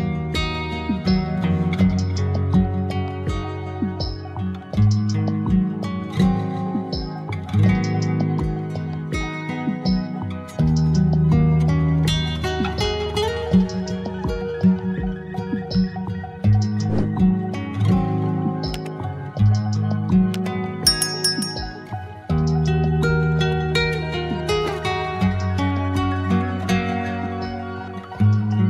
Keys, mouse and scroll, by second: 1.6-4.6 middle drag, 4.6 click, 6.2 click, 8.5 click, 11.5-12.7 scroll down 5, 12.7-13.2 drag, 13.2-13.6 scroll down 3, 13.6-15.4 drag, 17.4-18.1 scroll down 1, 18.1-18.6 scroll down 2, 19.4-20.0 scroll down 4, 20.2 scroll down 4, 20.9-22.1 scroll down 5, 22.9-25.9 drag.